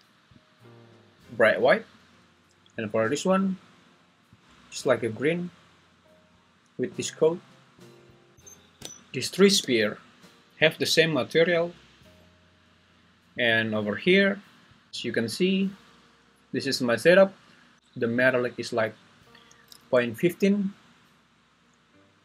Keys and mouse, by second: 8.1 click, 8.4 shift+Escape, 9.6 g, 12.0 Escape.